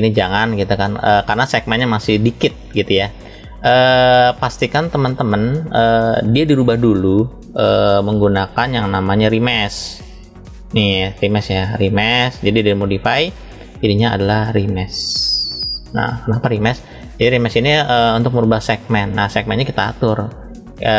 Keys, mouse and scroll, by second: 3.8-4.8 drag, 5.3 drag, 5.9 click, 6.8-8.9 scroll up 1, 9.6-11.1 drag, 11.9 click, 13.6-15.8 drag, 17.3-19.2 middle drag.